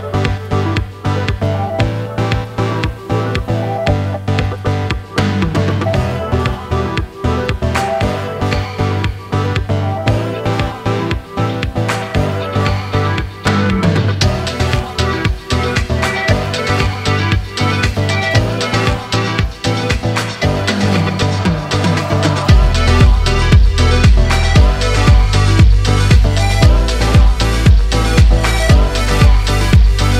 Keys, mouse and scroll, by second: 0.9-4.1 drag, 6.1 click, 6.9-11.4 drag, 12.6-15.8 drag, 17.7-19.7 middle drag, 19.7 scroll up 2, 20.2-21.3 middle drag, 21.3 KP_1, 22.8 g, 25.8-29.3 middle drag, 29.3 shift+z.